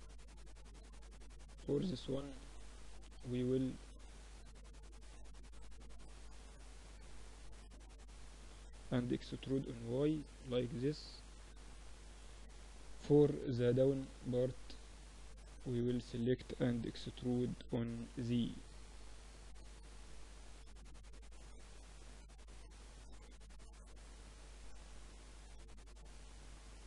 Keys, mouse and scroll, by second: 0.3 Tab, 0.5 click, 0.8 Tab, 2.2-3.4 middle drag, 3.4 click, 5.3-8.7 drag, 8.2 e, 8.7 middle click, 9.6 middle click, 13.6-15.8 middle drag, 15.8-16.9 drag, 15.8 e, 22.6 Tab, 24.0 Tab, 26.0 ctrl+r.